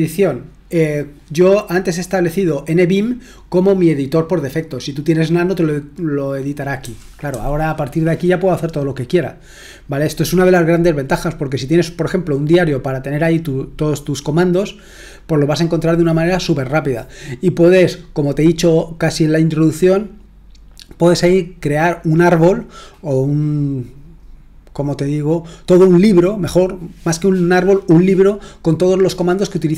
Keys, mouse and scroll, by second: 6.8-7.3 typing.